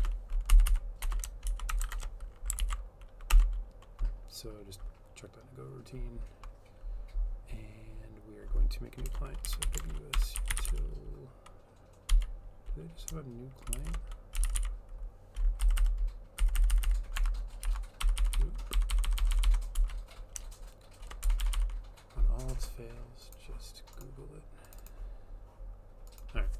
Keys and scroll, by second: 0.0-1.9 typing, 2.6 ctrl+s, 3.4 Return, 9.1 Return, 9.3-11.2 typing, 13.5-15.1 typing, 15.6 Down, 15.8 Down, 16.5 Down, 16.6 Down, 16.7 Down, 16.9 Down, 18.1 Up, 18.1-19.9 typing, 21.2-22.4 typing, 23.5 typing.